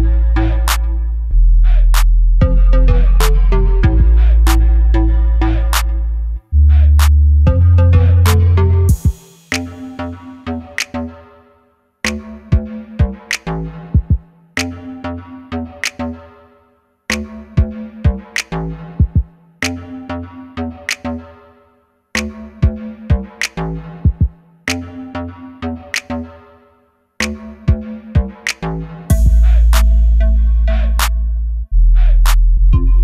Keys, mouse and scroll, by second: 0.0-2.1 middle drag, 2.1-3.6 right drag, 3.4 Tab, 3.6 click, 4.3 g, 5.8 Escape, 6.0 middle click, 6.8 click, 7.3 Tab, 7.7 click, 8.5 Delete, 8.7 click, 8.9-10.2 middle drag, 9.6 scroll up 1, 10.2 click, 10.5 Tab, 10.9 click, 11.3 g, 13.7 click, 14.0 scroll down 1, 14.2-17.3 middle drag, 14.9 scroll down 1, 17.3 click, 17.6 Tab, 18.1 ctrl+r, 21.7 click, 21.9 s, 24.7 click, 25.4-26.9 middle drag, 26.9 click, 27.4 ctrl+b, 29.3 click, 29.6-33.0 middle drag, 30.2 scroll down 1, 32.6 scroll down 1.